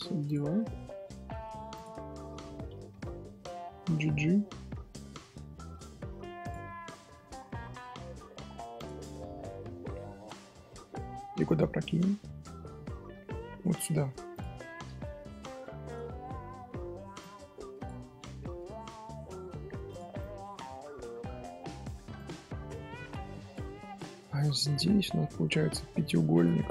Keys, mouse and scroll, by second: 0.6 z, 1.7 alt+click, 6.6 middle click, 7.5 1, 7.6-8.7 middle drag, 8.7 click, 9.0-12.0 middle drag, 12.7 scroll down 1, 12.7 scroll up 1, 12.9-14.3 middle drag, 14.3 shift+click, 15.5 j, 16.2 middle click, 17.2 click, 20.2 click, 22.5 middle click, 23.1 Tab, 23.3 scroll down 1, 23.4 scroll up 2, 24.4 click, 25.1-26.1 middle drag, 26.1 scroll down 1, 26.3 shift+click.